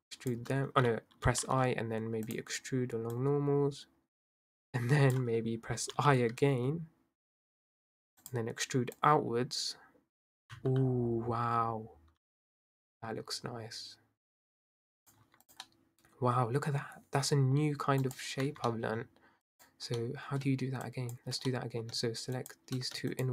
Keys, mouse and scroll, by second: 0.1 shift+click, 1.2 i, 3.1 click, 6.0 i, 8.9 click, 15.2 Tab, 15.5 click, 15.7-18.1 middle drag, 18.1 click, 18.5 Tab, 18.7 middle click, 18.9-19.4 scroll up 1, 19.4 drag, 20.0 middle click, 20.9 shift+click, 21.5 middle click, 22.3 shift+click, 23.1 shift+click.